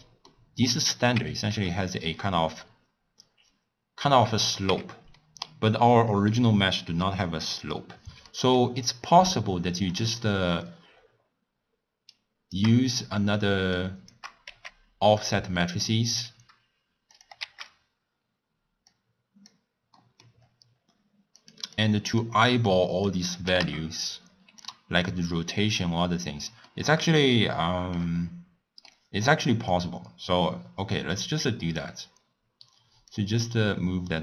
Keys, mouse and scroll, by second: 1.1 Tab, 1.5 3, 1.8 click, 4.7 Tab, 5.2-5.6 middle drag, 5.6 scroll down 1, 5.8-6.5 scroll up 4, 6.6-7.5 middle drag, 7.5 click, 8.3 middle click, 8.8-9.1 scroll down 1, 9.5 click, 10.9 scroll down 2, 11.0-11.5 scroll up 1, 12.1 shift+right click, 14.4 g, 15.6 middle click, 16.0 scroll down 6, 17.1 click, 17.7 shift+d, 20.0 middle click, 20.3-20.7 scroll up 1, 21.3 click, 21.7-26.7 drag, 26.7-29.7 middle drag, 29.7-32.7 drag, 33.1-34.2 drag.